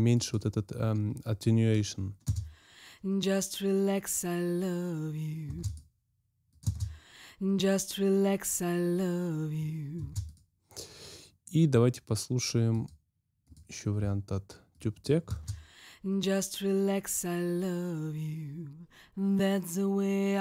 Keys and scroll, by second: 2.2 space, 5.4 space, 6.6 space, 9.9 space, 15.3 space.